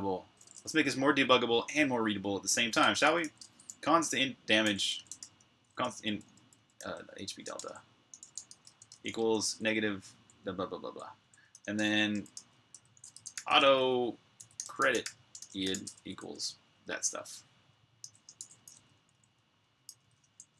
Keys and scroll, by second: 2.4-9.7 typing, 17.9-20.5 typing.